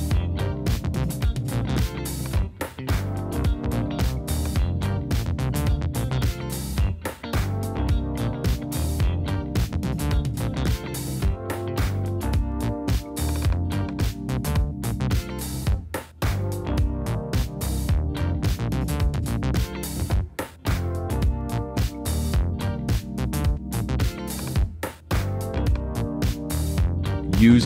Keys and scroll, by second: 5.5-10.7 typing, 15.5 super+a, 16.1 shift+super+a, 16.4 shift+super+y, 16.5-18.9 typing, 20.1-23.2 typing.